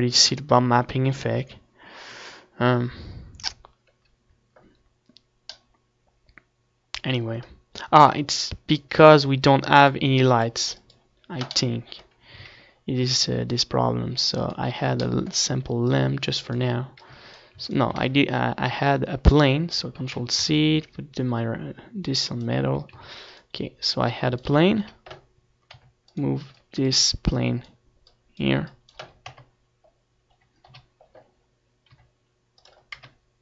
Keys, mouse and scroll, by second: 12.2-14.9 drag, 14.9 middle click, 15.8 shift+a, 18.3-20.8 middle drag, 19.1-21.8 drag, 20.8 x, 21.2 shift+a, 23.1 shift+c, 23.5 shift+a, 25.9 s, 26.4-28.3 drag, 27.7 KP_1, 28.7 r, 29.1-33.1 drag, 32.2 KP_0, 33.1 middle click.